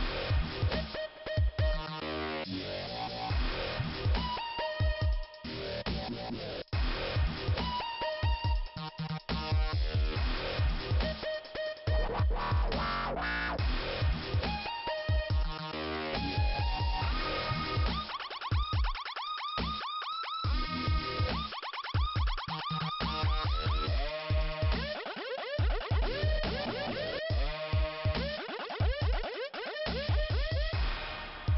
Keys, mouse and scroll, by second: 0.0 scroll down 1, 1.7 scroll up 2, 4.9 click, 5.1 click, 5.8 scroll down 2, 6.3 right click, 7.4 click, 8.4-9.5 scroll down 2, 9.7 p, 10.2 scroll down 1, 12.9 scroll down 2, 14.0 click, 14.4 right click, 14.5 double right click, 15.5 double right click, 15.7 click, 16.6 click, 18.7 click, 20.5 right click, 21.6 click, 23.5 click, 24.9 click, 26.5 click, 27.4 scroll up 2, 30.8 click.